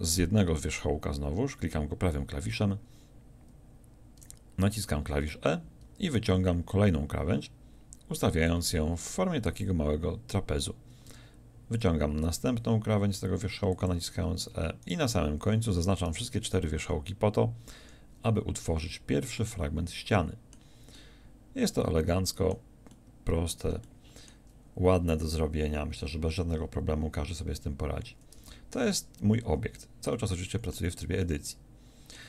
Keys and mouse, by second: 4.2 e, 8.4-11.1 drag, 11.1 e, 13.8 click, 17.8 f, 18.8 a, 28.4 Tab, 29.4 Tab.